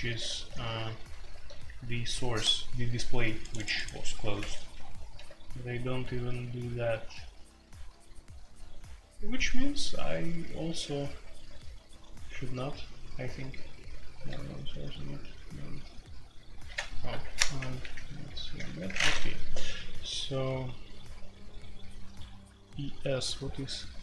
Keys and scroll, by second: 0.8-1.5 typing, 4.8 j, 14.1 typing, 17.8-18.6 typing, 23.1-24.0 typing.